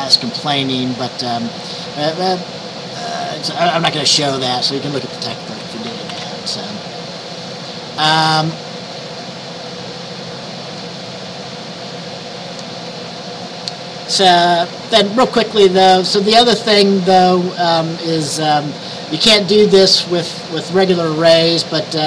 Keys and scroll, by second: 5.3-6.7 typing.